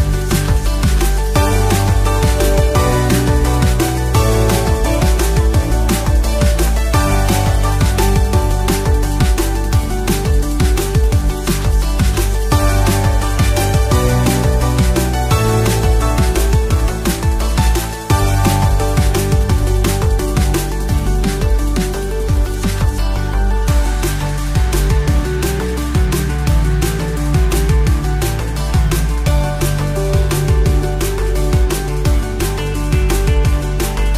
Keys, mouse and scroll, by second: 0.1 alt+shift+click, 0.8 alt+shift+click, 1.4 alt+shift+click, 2.0 alt+shift+click, 2.6 alt+shift+click, 3.4 alt+shift+click, 4.0 alt+shift+click, 4.8 alt+shift+click, 5.7 alt+shift+click, 6.2 alt+shift+click, 6.8 alt+shift+click, 7.6 alt+shift+click, 8.5 alt+shift+click, 9.6 alt+shift+click, 10.2 alt+shift+click, 10.9 alt+shift+click, 11.8 scroll down 1, 12.0-13.1 middle drag, 15.8 ctrl+b, 18.2 click, 19.4-22.0 drag, 22.8-23.2 scroll up 1, 23.2-25.2 middle drag, 25.2 scroll down 1, 25.6 middle click, 26.0 scroll down 1, 27.0 3, 30.1 ctrl+i, 30.8-32.7 right drag, 32.7-33.1 scroll down 2, 33.1-34.1 middle drag.